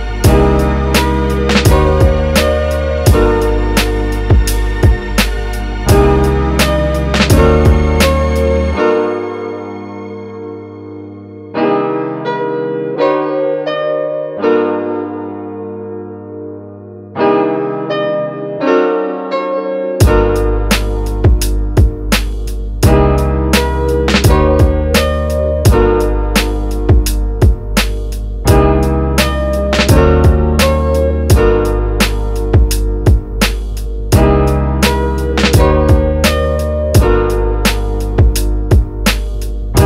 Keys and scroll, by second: 2.3 super+z, 10.3 space, 11.1 space, 24.7 super+s, 25.1 Right, 25.5 BackSpace, 25.6 6, 25.7 Return.